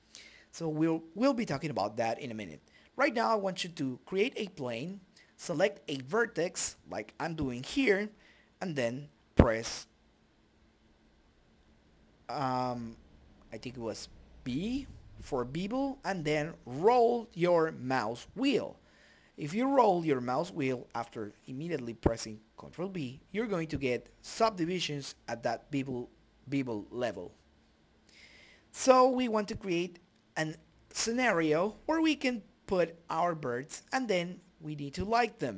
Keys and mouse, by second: 0.9 e, 2.3 middle click, 2.6 right click, 3.0 2, 3.2 click, 4.0 b, 4.9 ctrl+b, 7.8 right click, 8.7 a, 9.0 right click, 10.0 a, 10.6-12.0 drag, 12.0 Tab, 12.5 middle click, 12.6 right click, 12.7 middle click, 12.8 right click, 13.0 middle click, 13.5 s, 14.5 middle click, 14.8 right click, 15.2 click, 16.0 middle click, 16.3 click, 16.3 right click, 16.9 s, 17.7 right click, 19.2 s, 19.7 g, 20.3-21.4 right drag, 21.2-22.5 middle drag, 22.5-25.3 drag, 25.3-26.9 right drag, 27.2-29.5 drag, 32.4 middle click, 32.5 right click.